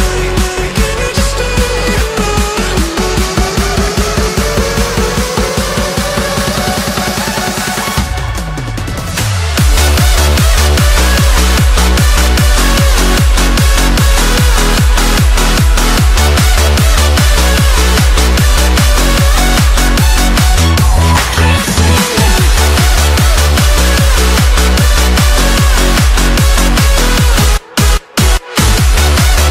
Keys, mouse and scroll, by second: 0.5 middle click, 1.0 g, 2.0-2.4 middle drag, 2.4 KP_7, 3.1-3.5 shift+middle drag, 3.5-4.1 scroll up 1, 4.1 g, 4.9-6.4 middle drag, 6.4 r, 15.8 click, 16.1 middle click, 17.0 click, 18.0 r, 20.1-20.7 middle drag, 20.7 click, 21.1-22.7 shift+middle drag, 22.7 click, 23.0 scroll up 1, 23.1 middle click, 23.7 click, 24.5 shift+d, 25.3 middle click, 26.2-26.6 scroll up 1, 26.6 r, 28.3-29.5 middle drag.